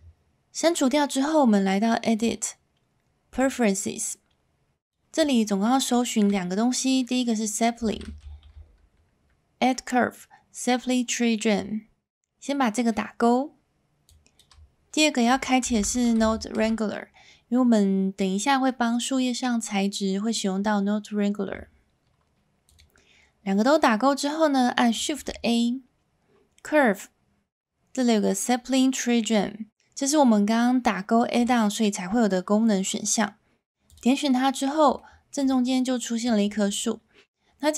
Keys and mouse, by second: 2.3-3.6 drag, 25.1 shift+a, 35.0-35.3 shift+middle drag.